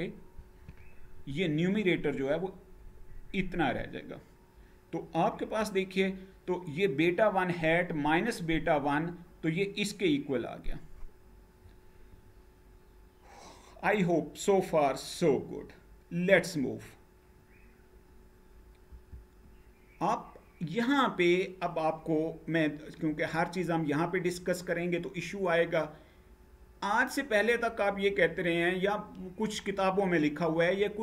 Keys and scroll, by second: 5.1 Page_Down, 18.6 Right.